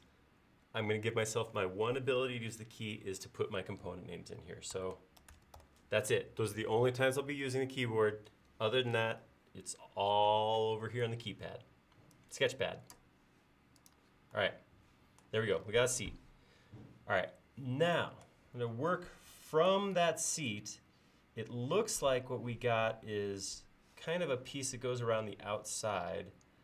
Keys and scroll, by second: 4.5-6.1 typing.